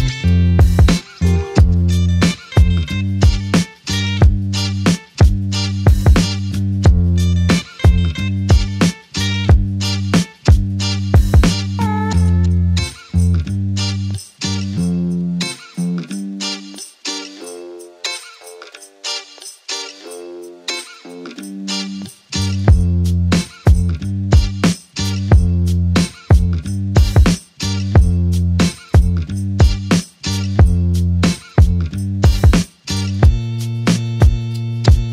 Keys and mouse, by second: 1.5 double click, 3.2 alt+click, 4.9 shift+click, 6.7 alt+click, 11.3 typing, 17.2 ctrl+i, 19.5 alt+click, 23.8 alt+click, 29.4 alt+click.